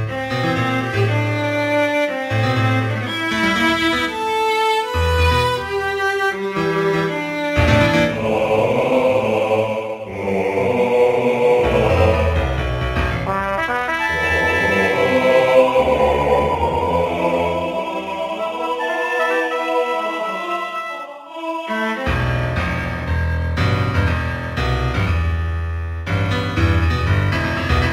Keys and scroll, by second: 14.9 x, 20.7 x, 21.2 x.